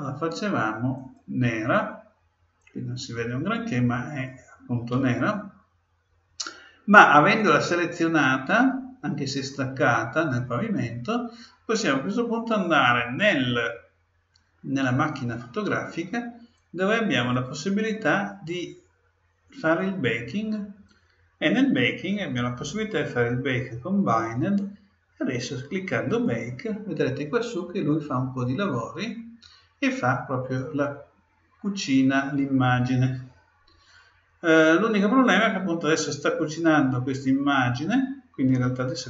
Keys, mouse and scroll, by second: 2.6-4.5 drag, 7.4-9.2 drag, 14.8-18.3 drag, 19.6-22.5 drag, 26.1-27.7 drag.